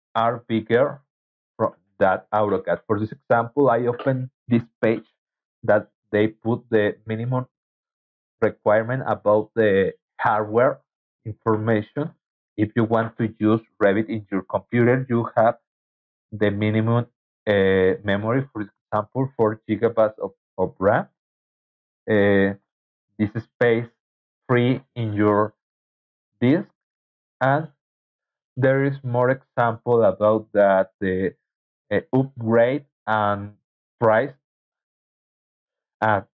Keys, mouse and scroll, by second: 0.1 alt+Tab, 0.4 alt+Tab, 4.0-5.0 scroll down 6, 5.5 scroll down 2, 8.6 scroll down 2, 13.2 scroll down 2, 16.9 scroll down 2, 17.5 scroll down 2, 18.8 scroll down 2, 20.5 scroll down 2, 23.8 scroll down 2, 26.0-26.6 scroll down 4, 32.2-32.9 scroll down 4, 33.4 scroll down 2.